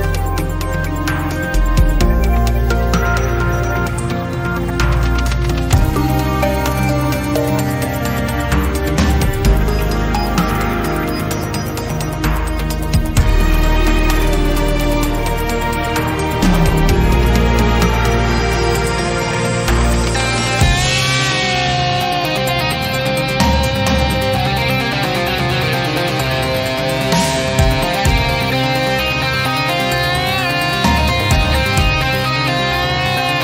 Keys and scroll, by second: 13.9 e, 24.7 ctrl+z, 26.4 z, 27.5 ctrl+z, 28.8 e.